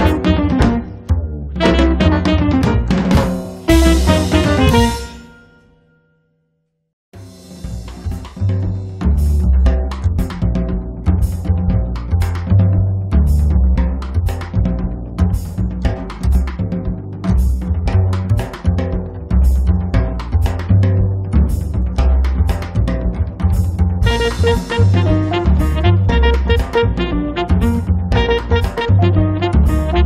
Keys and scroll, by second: 5.9 space, 6.4 Escape.